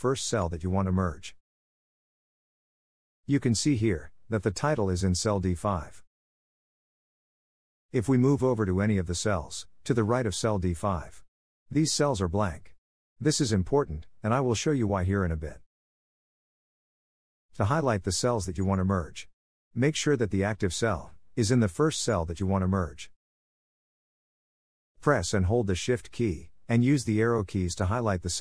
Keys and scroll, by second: 0.6 Down, 9.5 Right, 21.5 Left.